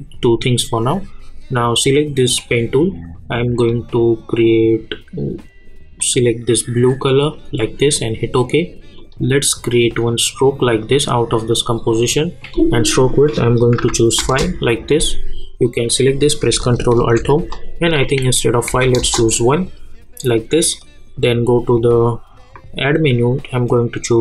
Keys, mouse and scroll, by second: 2.3 click, 6.0-7.9 drag, 14.2 Return, 15.0 click, 16.9 ctrl+alt+Home, 18.5 click, 19.0 Return, 19.6-24.2 drag.